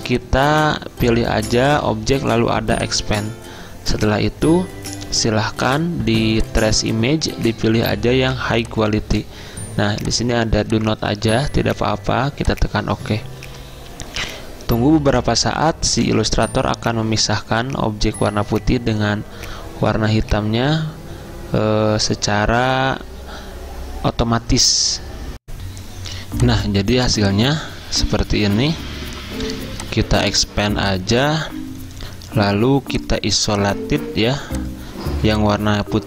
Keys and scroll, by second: 25.4 alt+Tab, 25.6 F10, 25.7 F10.